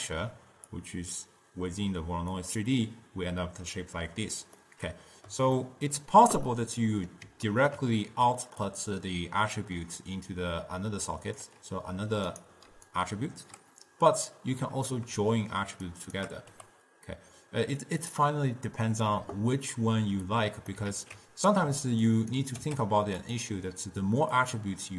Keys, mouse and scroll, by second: 0.8 click, 4.7-8.8 middle drag, 8.8 click, 12.9 d, 13.2 right click, 13.7 d, 15.9 shift+right click, 16.6 g, 20.7 click, 21.0 ctrl+x, 22.1 shift+right click, 22.7 g, 24.4 click.